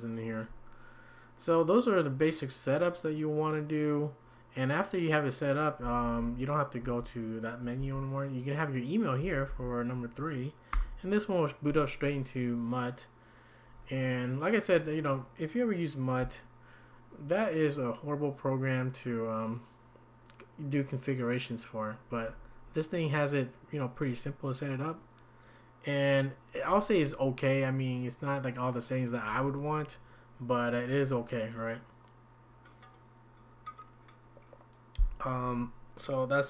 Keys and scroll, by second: 5.8 Down, 6.8 Down, 7.8 Up, 9.2 Down, 9.5 Up, 10.7 Return.